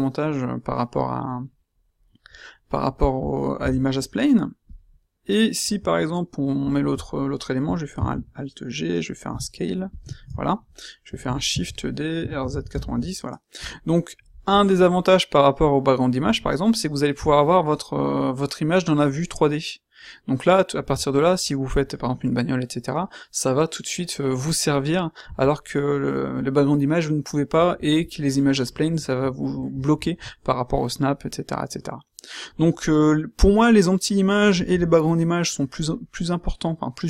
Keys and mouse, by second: 7.9 alt+g, 9.3 s, 11.2 shift+d, 12.1 r.